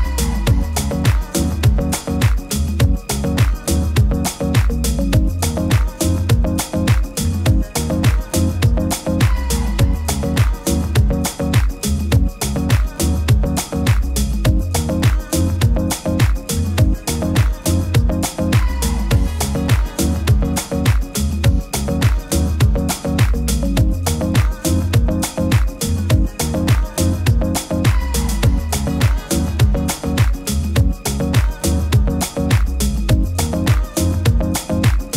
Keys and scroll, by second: 9.5 super+t, 24.1 super+t, 30.4 super+g, 31.0 super+g, 33.9 super+g.